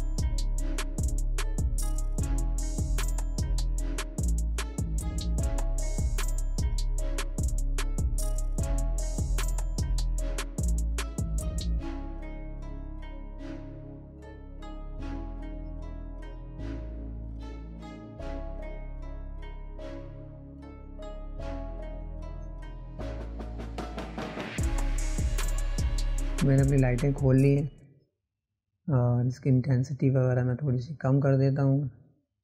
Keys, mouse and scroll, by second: 5.5 click, 7.7 click, 10.2-17.7 drag, 19.7 click, 21.4 click, 25.7 click, 29.1-32.1 drag.